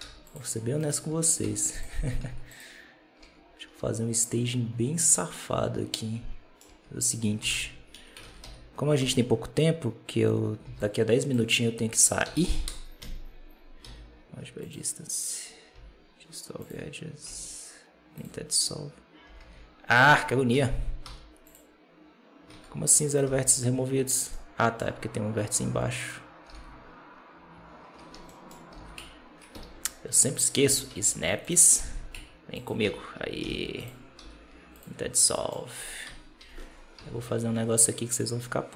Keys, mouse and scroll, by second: 0.4-0.7 scroll down 1, 0.7 right click, 1.0 Tab, 1.3 z, 2.1 z, 2.7-3.1 scroll up 3, 3.1 Tab, 3.3-3.9 scroll down 3, 5.0-6.5 middle drag, 6.5 Tab, 7.3 KP_7, 7.4 z, 7.8 1, 8.1 alt+a, 8.3 b, 10.5 b, 12.1 s, 13.7 m, 15.6 x, 17.1 x, 19.1 g, 20.4 a, 20.9 m, 22.4 alt+a, 23.0 right click, 23.1 g, 24.2 middle click, 24.9-25.3 scroll up 2, 25.9 right click, 26.3 g, 28.2 middle click, 28.6 g, 30.8 ctrl+shift+Tab, 31.7 g, 32.7 a, 33.3 m, 34.1 x, 35.0 scroll down 1, 35.2 middle click, 35.9 KP_7, 36.3 Tab, 36.9 shift+a.